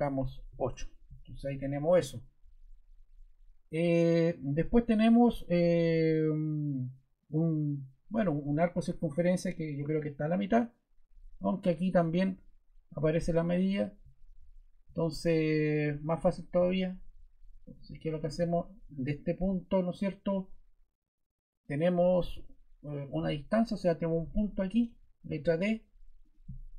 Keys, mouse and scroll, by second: 0.4 8, 0.6 Return, 24.8 ⟲, 25.2 d.